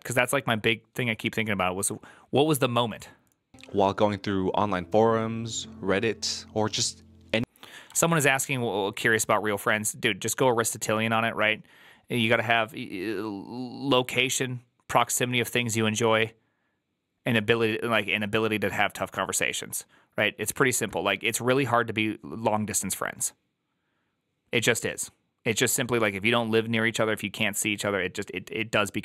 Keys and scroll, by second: 7.8 alt+[.